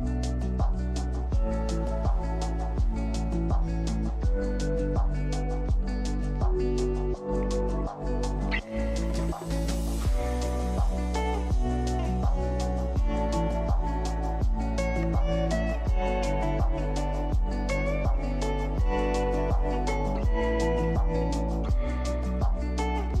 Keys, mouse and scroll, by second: 0.1 shift+middle click, 0.8 shift+click, 1.7 alt+shift+click, 2.4 alt+shift+click, 3.4 alt+shift+click, 3.7 scroll down 2, 3.9 middle click, 4.3 scroll up 2, 4.5 shift+middle click, 5.3 alt+shift+click, 5.8 alt+shift+click, 6.3-7.8 middle drag, 7.9 alt+shift+click, 8.2 alt+shift+click, 8.6 scroll down 1, 9.0-9.6 scroll up 3, 9.9 ctrl+b, 18.5 click, 18.9-19.3 scroll down 3, 19.3 Tab, 19.5-19.9 scroll up 3, 19.9-20.3 shift+middle drag, 20.3 click, 20.6 scroll down 2, 20.8-21.1 shift+middle drag, 21.1 scroll up 3, 21.4 click, 21.5-22.3 right drag, 22.3 click, 22.5 scroll down 1, 22.7-23.2 shift+middle drag.